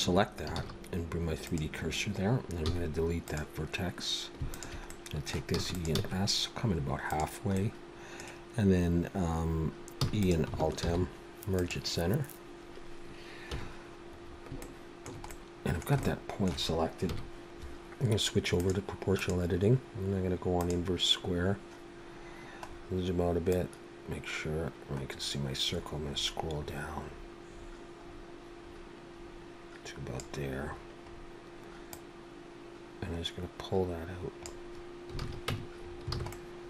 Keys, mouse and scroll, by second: 0.6 shift+s, 2.7 x, 4.4 alt+shift+click, 4.9 middle click, 5.6 e, 5.9 s, 7.7 middle click, 10.0 e, 10.9 alt+m, 13.5 KP_1, 14.3-14.6 scroll up 3, 14.6 shift+middle click, 15.3 middle click, 16.0 shift+middle click, 17.0 KP_1, 18.6 click, 19.2 click, 21.9-22.4 scroll down 4, 22.7-23.1 scroll down 2, 23.5 click, 30.6-31.7 scroll up 8, 31.9 click, 35.2 alt+a, 35.5 Tab, 35.9 scroll down 3, 36.1 alt+a, 36.3 middle click.